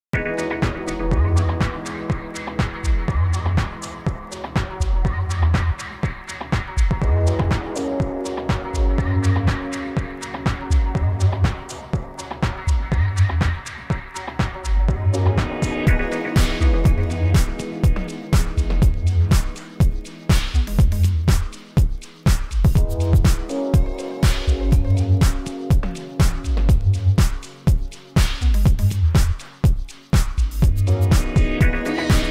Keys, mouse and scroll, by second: 1.0 click, 2.8 click, 5.1 click, 7.5-9.1 drag, 10.2 ctrl+z, 10.6 click, 14.1-17.2 drag, 18.7-20.3 drag, 22.0 click, 22.2-22.8 alt+shift+drag, 25.4-26.9 alt+shift+drag, 28.6 g, 29.4-30.2 drag.